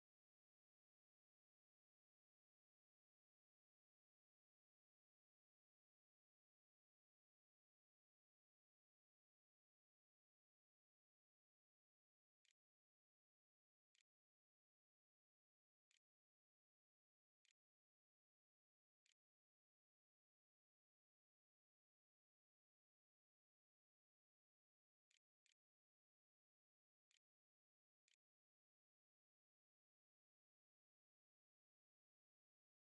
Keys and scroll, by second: 11.5-15.4 typing, 16.8-19.3 typing, 24.6-27.4 typing, 27.7 Return, 31.4-32.8 typing.